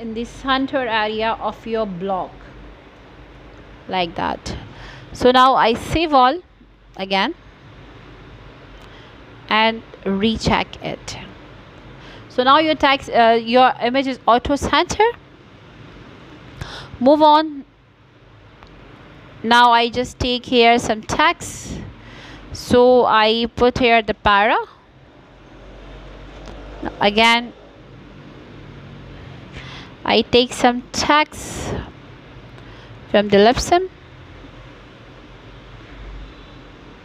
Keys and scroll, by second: 8.7 Return, 9.2 Return, 12.0 shift+,, 13.6 p, 14.0 shift+., 17.2 ctrl+v, 18.8 ctrl+z, 32.7 ctrl+c.